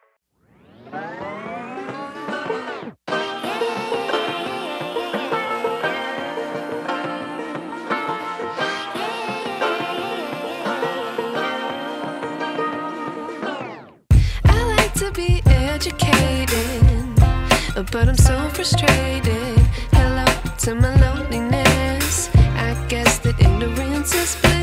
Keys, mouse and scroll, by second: 0.7 alt+scroll down 2, 1.0-1.3 alt+scroll up 2, 1.3 click, 6.3-6.8 alt+scroll down 2, 6.8 click, 15.4-15.7 alt+scroll down 2, 15.7 click, 16.3-16.7 alt+scroll down 2, 16.7 click, 18.3-18.6 alt+scroll up 2, 18.6 click, 23.3-24.1 alt+scroll up 2, 24.1 click.